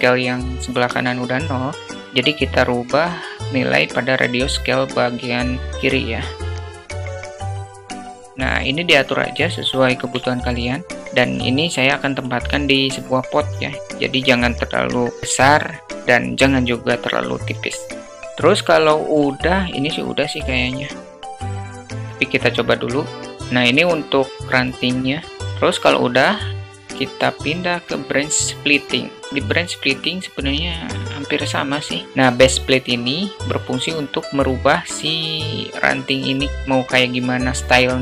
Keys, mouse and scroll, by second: 5.7 click, 7.0-8.8 drag, 9.5-10.6 middle drag, 21.3-24.3 drag, 25.8 click, 26.0-27.9 drag, 31.4 click, 32.9 click, 33.1 click, 35.7-36.9 alt+middle drag.